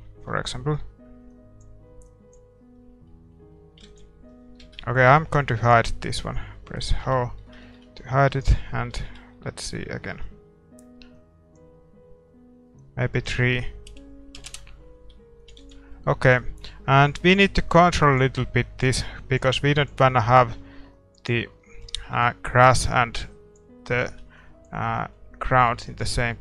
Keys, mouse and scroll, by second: 1.3-4.0 drag, 2.8-3.1 scroll down 1, 3.1-7.0 middle drag, 3.9 ctrl+s, 4.7 shift+z, 5.6-7.3 right drag, 7.0 h, 7.3-9.4 middle drag, 8.3-10.1 right drag, 9.1 shift+z, 9.7-11.6 middle drag, 11.2-14.7 drag, 15.5-26.4 drag, 15.6 ctrl+s, 21.5-26.4 middle drag, 22.2 ctrl+s.